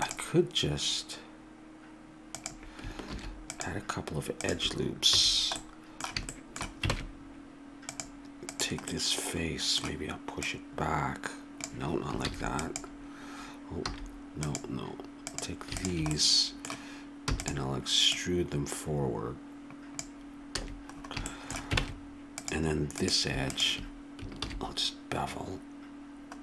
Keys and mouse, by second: 3.1 ctrl+r, 5.1 a, 6.9 ctrl+Tab, 10.4 right click, 10.8-12.0 drag, 12.2 ctrl+z, 13.9 a, 16.1 right click, 16.2-17.2 middle drag, 17.2 e, 20.5 a, 21.8 ctrl+Tab, 24.4 ctrl+b.